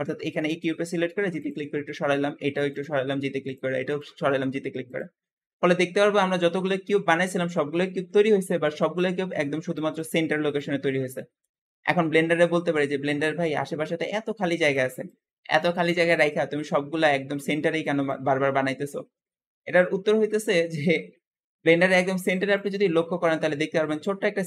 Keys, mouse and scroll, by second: 1.8 scroll down 2, 2.1-2.6 shift+middle drag, 2.6 click, 3.0 g, 3.9 click, 4.2 g, 5.4-11.6 middle drag, 11.8-14.3 scroll down 6, 16.9-19.4 scroll up 4, 19.4 scroll up 5, 20.1 middle click, 20.9-21.3 scroll up 2, 21.3-24.4 shift+middle drag.